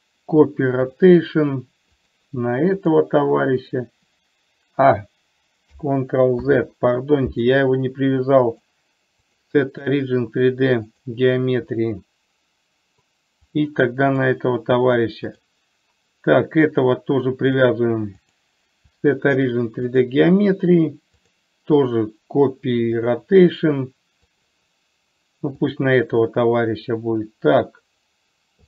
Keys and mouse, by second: 0.3-1.5 drag, 2.5 click, 6.8 ctrl+z, 8.7-11.5 drag, 13.8 click, 18.6-20.3 drag, 21.7-23.5 drag, 24.7 click.